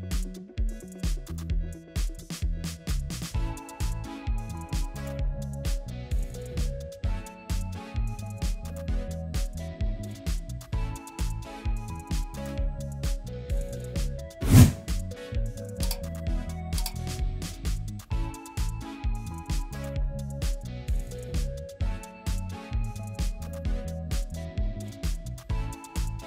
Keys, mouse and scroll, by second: 16.6 scroll up 1, 18.3-18.9 typing, 22.8 double click.